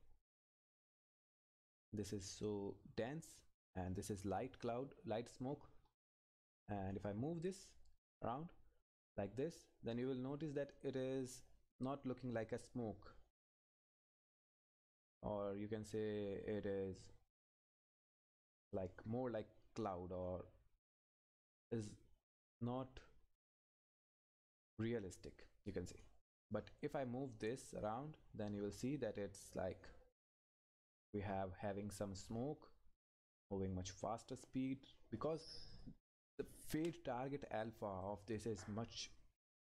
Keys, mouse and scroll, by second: 1.7-2.2 scroll up 1, 4.1 click, 5.8-6.4 scroll up 1, 6.4 click, 7.6-8.8 scroll down 1, 8.8 click, 22.1-23.4 scroll up 1, 23.4 click, 37.4-38.0 scroll up 1, 38.0 click, 38.6-39.3 scroll up 1.